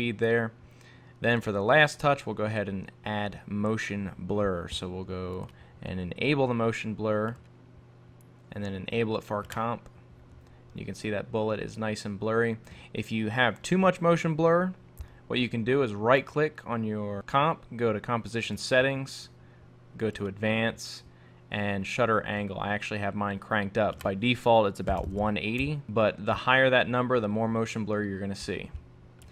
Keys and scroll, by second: 25.6 Return.